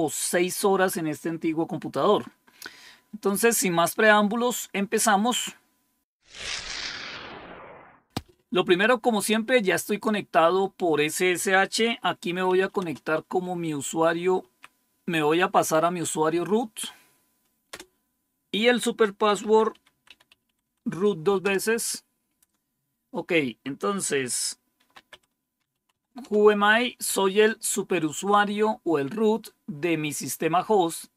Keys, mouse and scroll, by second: 8.1-12.4 drag, 12.1-13.0 typing, 14.3 typing, 17.6 Return, 19.1-21.2 typing, 21.3 Return, 24.5-26.3 typing.